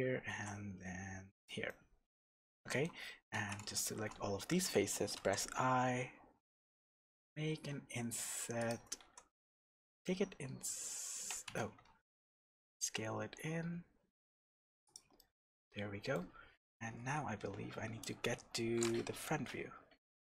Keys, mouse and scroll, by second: 0.3 e, 1.4 click, 1.6-3.3 middle drag, 3.3 alt+a, 3.7 alt+shift+click, 5.1 i, 8.7 click, 9.0 e, 11.5 Escape, 11.8 s, 14.9 click, 15.1-20.2 middle drag, 16.5-16.9 scroll down 1, 16.9 KP_1, 17.3 scroll down 1, 18.3 Tab, 19.2 KP_3.